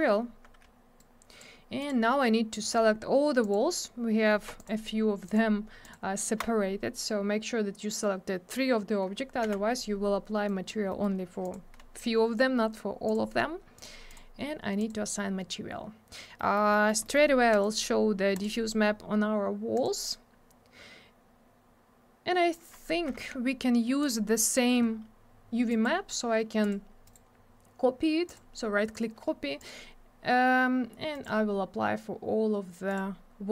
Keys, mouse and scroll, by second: 1.0 click, 1.8 click, 1.9 click, 2.6 click, 2.7 click, 3.4 click, 3.5 click, 4.6 ctrl+click, 5.3 ctrl+click, 5.8 ctrl+click, 9.5 m, 10.5 click, 10.9 middle click, 11.0 middle click, 11.4 click, 11.5 double click, 12.7-13.1 scroll up 1, 13.1 click, 13.1 click, 13.8 click, 13.8 click, 14.1 click, 14.2 click, 14.8 click, 14.9 click, 16.4 middle click, 16.6 middle click, 16.7 middle click, 16.9 double middle click, 17.0 middle click, 17.2 middle click, 17.5 right click, 17.6 double right click, 18.3 click, 18.4 click, 19.8 click, 19.8 click, 23.2 alt+w, 24.0 click, 25.7 right click, 26.6 click, 27.1 right click, 27.1 double right click, 28.3 click, 28.4 click, 29.6 click, 29.7 click, 31.1 right click, 31.2 right click, 32.9 click, 33.0 click.